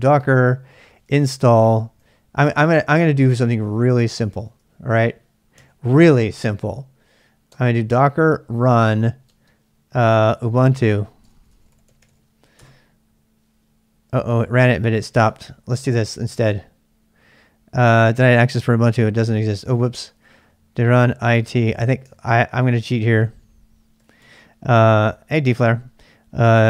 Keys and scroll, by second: 0.0-6.0 typing, 7.5 typing, 9.2-13.0 typing, 14.4-15.8 typing, 18.4-24.7 typing, 21.7 ctrl+[, 26.5 typing.